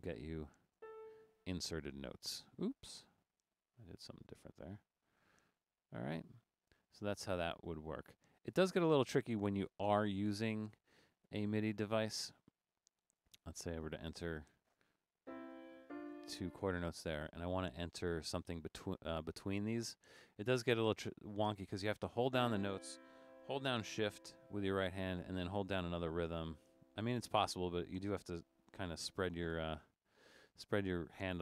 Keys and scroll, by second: 0.0 Down, 0.8 shift+4, 1.3 shift+Down, 3.1 shift+Up, 3.8 Right, 4.0 Right, 4.1 Right, 4.3 Right, 4.8 Right, 5.0 Right, 5.3 Right, 6.3 Right, 15.6-16.2 typing, 17.5 BackSpace, 26.3-27.6 typing, 28.9 1.